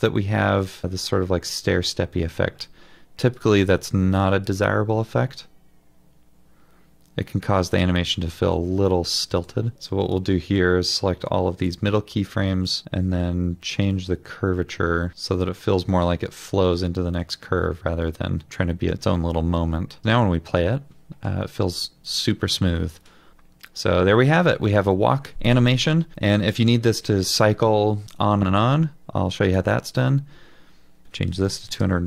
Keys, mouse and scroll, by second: 31.1-32.0 typing.